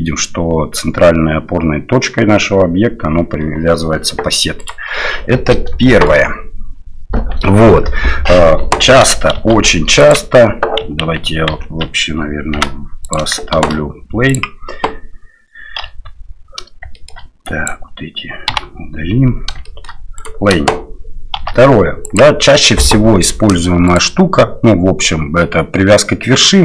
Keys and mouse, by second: 5.9 shift+middle drag, 9.4 shift+d, 11.0 ctrl+z, 11.5 ctrl+z, 12.6 x, 13.6 shift+a, 15.8 KP_7, 16.9 shift+drag, 17.5 click, 18.5 Delete, 19.7 shift+drag, 20.2 click, 21.4 shift+d, 23.9-26.6 drag.